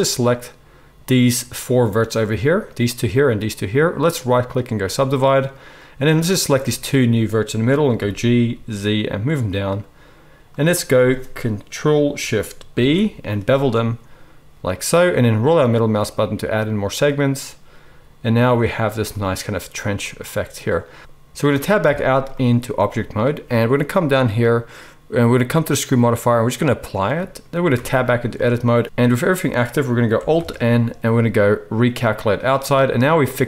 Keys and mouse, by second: 7.9 g, 12.7 ctrl+shift+b, 12.7 ctrl+shift+right click, 12.9-18.3 ctrl+shift+drag, 18.3-25.6 right drag, 21.0 Tab, 21.8 Tab, 25.6-33.4 middle drag, 27.7 Tab, 30.3 alt+n.